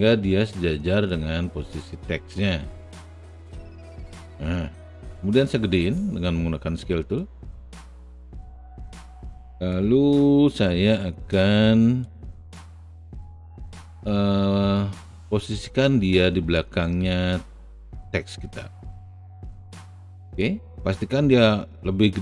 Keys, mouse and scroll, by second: 2.4 r, 3.5-5.9 drag, 7.1-8.4 drag, 8.4 w, 9.7-10.8 drag, 11.4 alt+right click, 12.2 alt+middle click, 13.2 alt+right click, 13.7-15.0 alt+middle drag, 18.6 click, 19.1 alt+middle click, 19.4 alt+right click, 19.6 alt+middle click, 19.7 alt+click, 20.9 alt+middle click.